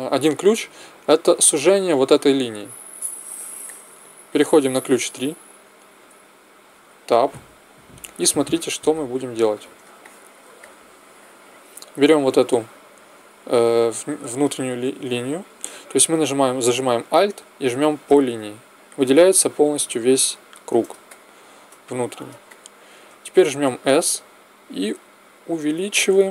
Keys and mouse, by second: 3.6-5.6 drag, 6.7 Tab, 21.0 middle click, 23.9 s.